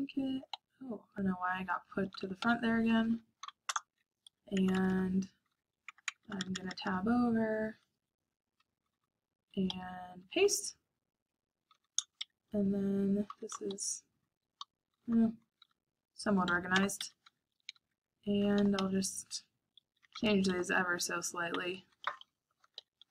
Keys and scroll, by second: 0.0-4.2 typing, 4.5 Tab, 5.4 i, 5.9 Tab, 6.6 Escape, 6.6 Tab, 6.7 Tab, 8.1 Escape, 8.3-23.1 typing, 9.6 Escape.